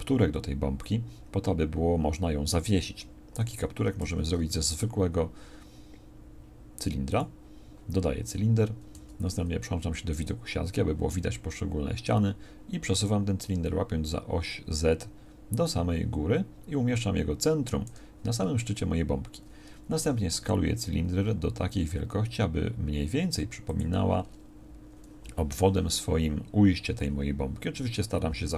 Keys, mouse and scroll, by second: 4.0 shift+a, 8.9 z, 20.0-23.5 middle drag, 20.0 s.